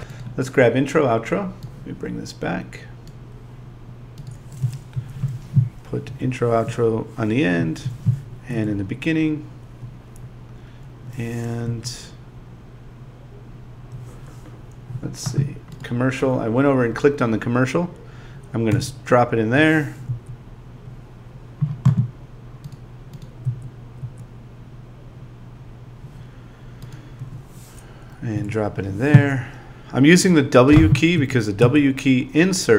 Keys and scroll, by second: 4.9 Home, 6.1 e, 7.6 Home, 11.6 Down, 18.7 w, 20.1 Down, 23.4 Down, 28.3 w, 31.2 Down.